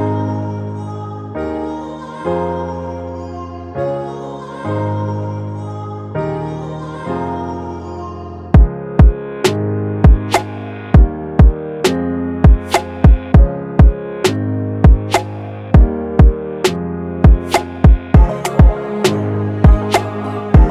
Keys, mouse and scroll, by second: 20.5 double click.